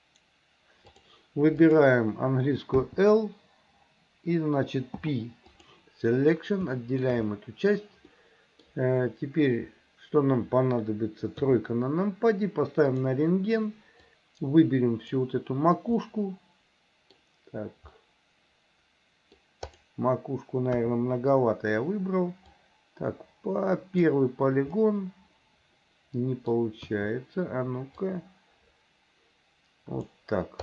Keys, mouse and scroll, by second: 0.9 click, 1.6 click, 2.9 l, 5.0 p, 6.8 shift+middle click, 8.1 middle click, 11.4 KP_3, 13.1-15.2 drag, 16.1-17.2 middle drag, 18.0-19.5 middle drag, 19.7 click, 20.8 KP_1, 22.6-24.1 drag, 24.9-26.6 middle drag, 26.9 KP_1, 28.1-30.2 drag.